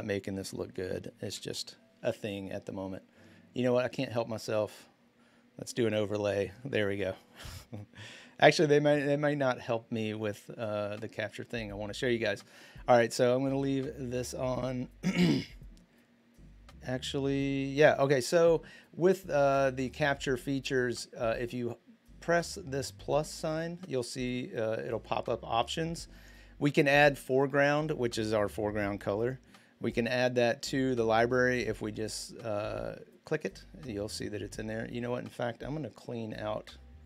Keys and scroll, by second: 1.0 Return.